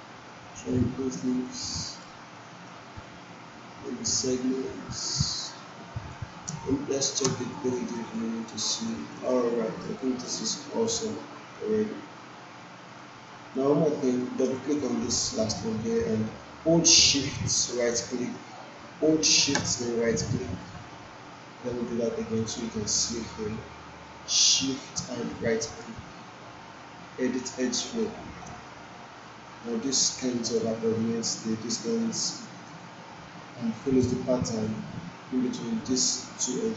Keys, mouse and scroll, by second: 1.8 alt+right click, 2.3-3.0 alt+middle drag, 4.1-6.3 drag, 6.4 space, 7.7 alt+right click, 8.1-9.0 alt+click, 8.6 alt+right click, 9.2 alt+middle click, 9.5 alt+click, 10.0 alt+right click, 10.5-13.0 alt+drag, 14.4 click, 17.4 shift+Num_Lock, 17.4 click, 17.8-24.8 shift+right drag, 24.8 shift+Num_Lock, 24.8 shift+right click, 25.3-28.4 shift+right drag, 29.7-30.6 alt+drag, 32.8-34.1 alt+drag.